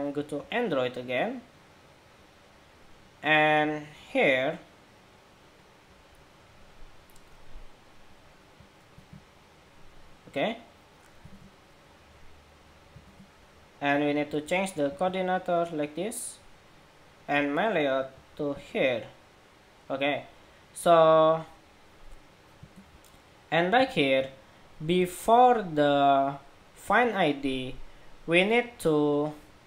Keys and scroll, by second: 8.7 super+v, 11.0 super+Tab, 13.2 super+Tab, 14.6 super+v, 18.1 super+v, 22.6 shift+super+2, 23.6 super+Tab.